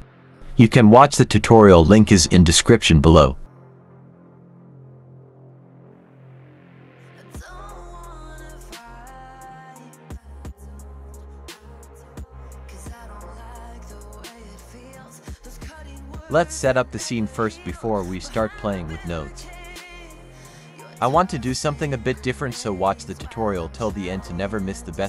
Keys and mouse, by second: 0.0 shift+a, 1.6 click, 3.3-4.5 drag, 5.6 drag, 6.1 click, 6.8 click, 9.4 click, 9.5 z, 10.0 click, 10.7 click, 13.0 shift+a, 14.7-18.7 typing, 15.0 click, 19.2 click, 19.3 click, 20.4 shift+click, 20.5 g, 21.2 click, 21.4 s, 22.6 right click, 23.4 g, 23.8 click, 24.0 r, 24.1 y, 24.3 x.